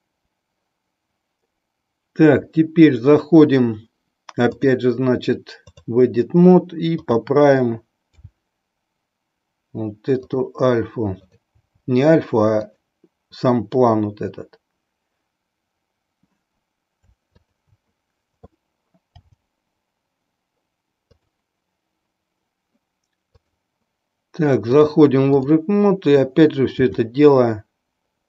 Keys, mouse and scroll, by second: 0.0 click, 4.6-5.8 drag, 7.0 click, 8.0 g, 11.1 click, 11.5 g, 12.6 click, 17.2 shift+click, 19.1 g, 23.2 click, 24.9 click, 26.8 r.